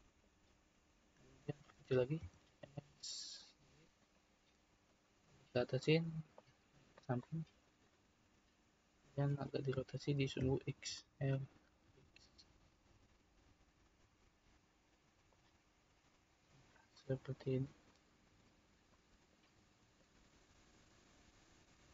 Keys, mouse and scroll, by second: 1.4-2.2 scroll up 1, 2.2 s, 4.9 click, 6.3 click, 7.2-9.7 middle drag, 9.7 e, 10.4 r, 16.1 click, 16.9-19.9 middle drag, 19.9 click, 21.0 click, 21.6-21.9 middle drag.